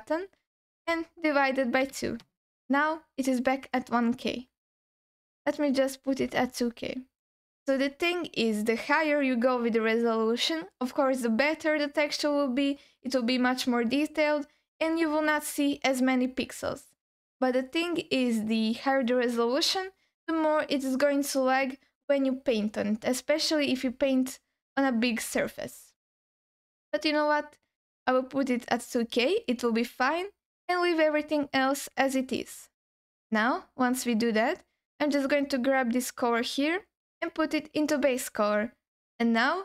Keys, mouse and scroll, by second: 35.7-38.1 drag, 39.2-39.6 scroll up 2.